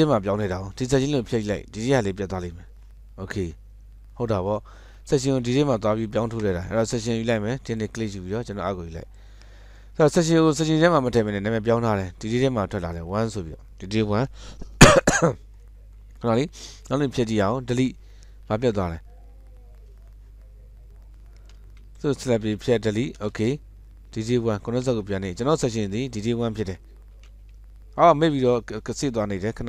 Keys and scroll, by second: 2.4 Delete, 13.0 Escape, 18.6 Delete, 21.8 Escape, 22.7 Delete, 25.1 ctrl+z, 27.4 ctrl+s.